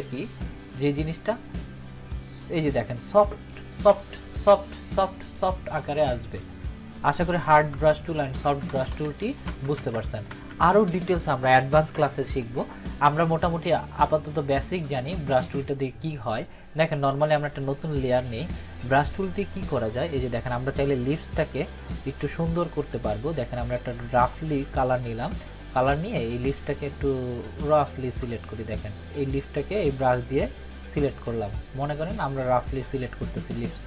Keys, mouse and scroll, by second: 7.7 ctrl+z, 11.9 ctrl+=, 14.3-14.9 click, 20.9-22.5 typing, 24.0 [, 24.2 [, 26.0-32.2 drag.